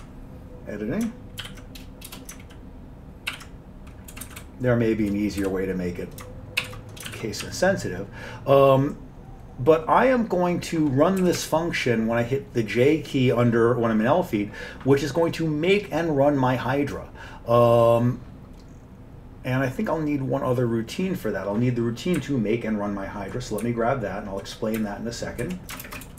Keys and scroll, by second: 0.0 alt+Tab, 1.5 ctrl+y, 2.2 Return, 3.4 ctrl+y, 4.2 Right, 4.3 Up, 4.5 Right, 5.0 Right, 6.7 j, 7.2 ctrl+d, 7.5 Down, 11.3 Up, 11.5 Up, 22.2 Up, 22.8 Up, 22.9-23.4 Up, 23.7-24.5 Up, 24.9 Up, 25.5 Right, 25.9 ctrl+shift+space, 26.1 ctrl+n.